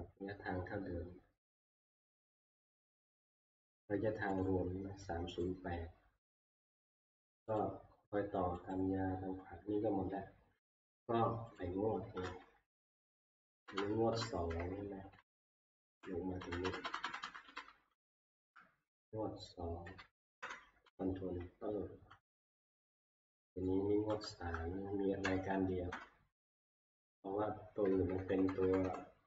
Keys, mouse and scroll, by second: 3.3 click, 4.4 click, 5.5 click, 6.5 click, 13.2 Left, 14.1 Up, 14.6 Down, 15.2 Down, 15.7 Up, 15.7 Down, 15.8 Down, 15.8 click, 16.4 Up, 16.7 Up, 16.8 Up, 17.0 Up, 17.2 Up, 17.5 Up, 18.0 Down, 19.9 2, 20.4 ctrl+Return, 21.4-21.9 Down, 22.0 Down, 22.6-23.2 Down, 25.2 Up, 25.9 Return, 27.7 Down, 27.9 Down, 28.2 Down, 28.4 Down, 28.6 Down, 28.8 Down.